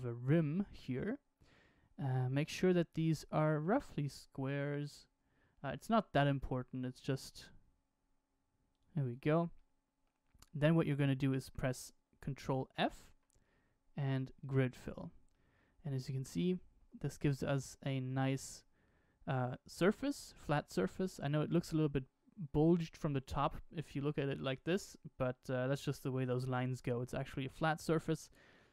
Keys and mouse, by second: 6.8 s, 9.5 middle click, 12.6 ctrl+f, 15.3-17.3 middle drag, 18.2-21.8 middle drag, 23.5-28.7 middle drag.